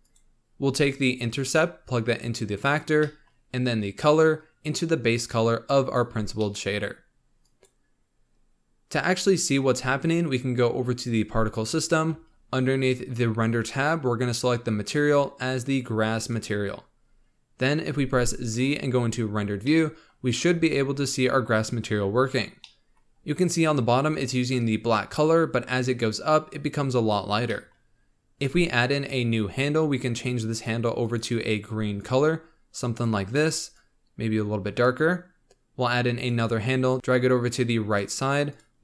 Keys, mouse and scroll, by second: 1.1 click, 3.0-4.2 middle drag, 4.2 click, 6.4-7.4 middle drag, 7.4-10.2 drag, 11.0 click, 12.2-14.8 scroll down 10, 14.8-18.0 drag, 18.0 z, 19.6 middle click, 20.1-20.8 scroll up 3, 20.8-22.6 scroll down 1, 22.6-26.9 middle drag, 26.9-27.5 scroll up 3, 27.5-29.1 middle drag, 29.1-31.1 drag, 36.1-38.5 drag.